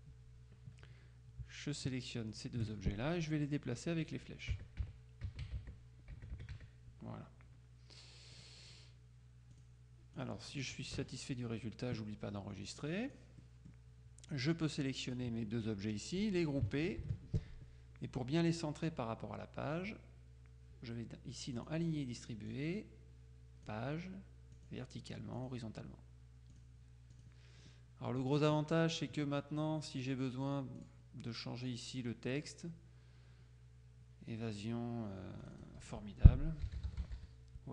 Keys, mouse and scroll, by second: 2.4 shift+click, 4.6 Right, 4.9 Up, 5.4 Right, 5.6 Up, 5.8 Right, 6.4 Right, 6.6 Up, 8.4 click, 9.6 click, 11.0 KP_Subtract, 12.8-13.7 drag, 14.4-15.7 drag, 17.1 ctrl+g, 21.6 click, 22.6-24.2 drag, 24.6 click, 25.4 click, 26.6-27.8 drag, 30.9 click, 35.5 click, 36.5-37.7 typing.